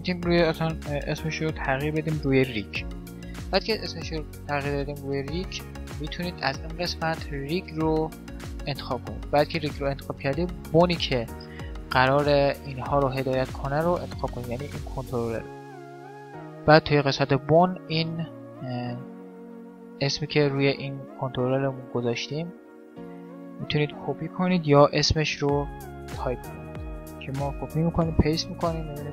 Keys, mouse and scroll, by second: 4.2-6.0 drag, 6.7-8.4 drag, 11.3-12.5 middle drag, 12.5 click, 12.5-15.9 right drag, 16.0 right click, 16.6-18.4 drag, 21.6-23.3 right drag, 22.8-24.5 drag, 25.9-27.6 right drag, 26.6-28.4 drag.